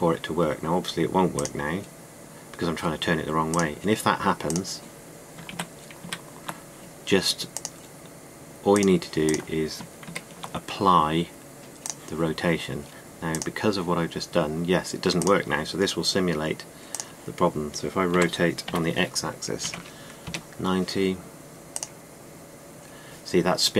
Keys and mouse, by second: 6.3 ctrl+z, 6.8 ctrl+z, 10.7 ctrl+a, 18.8 r.